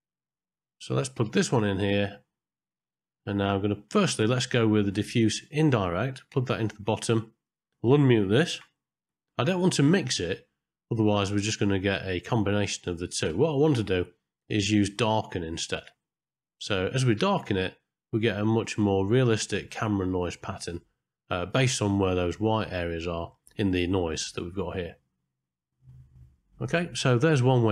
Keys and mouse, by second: 1.1-1.9 drag, 4.4-6.5 drag, 7.4 click, 8.5 m, 9.9 click, 12.9 click, 14.3-15.8 drag, 17.2-19.7 drag, 25.7 middle click, 26.1 middle click.